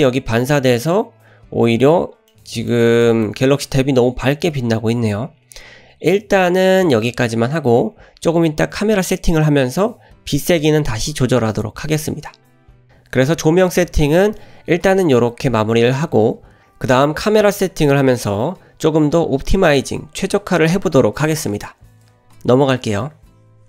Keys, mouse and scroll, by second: 1.5-2.2 scroll up 2, 2.3-2.7 middle drag, 3.1 shift+middle drag, 3.3-3.6 scroll up 1, 5.1 scroll down 1, 5.2-6.7 scroll down 1, 12.7 scroll down 2.